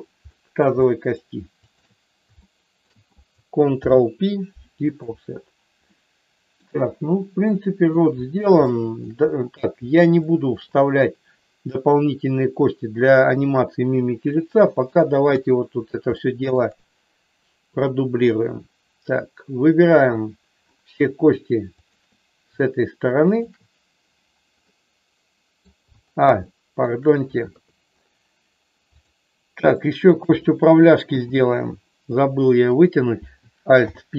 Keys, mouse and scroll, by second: 0.3 middle click, 0.7 shift+middle click, 1.6 shift+click, 2.4 shift+middle click, 3.8 ctrl+p, 5.9 middle click, 7.4 middle click, 8.7 shift+middle click, 10.2 shift+middle click, 14.3 middle click, 15.3 KP_1, 16.1 shift+middle click, 18.2-20.2 drag, 21.7 shift+click, 23.2 shift+click, 24.7-25.7 middle drag, 26.4 shift+middle click, 27.4 KP_3, 29.7 shift+middle click, 31.0 e, 32.0 click, 32.7 click, 33.7 alt+p.